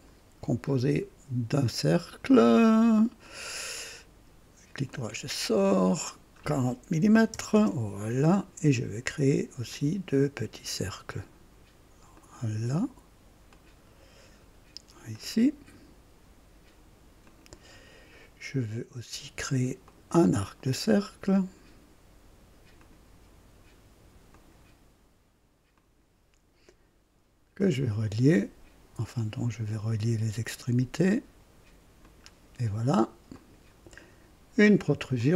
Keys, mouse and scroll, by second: 2.0 click, 3.2 click, 3.7 right click, 4.9 click, 6.0 click, 7.0 KP_4, 7.3 KP_0, 7.5 Return, 9.7 click, 12.1 click, 13.5 click, 15.1 click, 17.2 click, 19.8 click, 22.7 click, 24.3 click, 25.7 click, 25.7 typing, 27.5 click, 29.7 click, 32.0 click, 33.3 click, 35.1 click.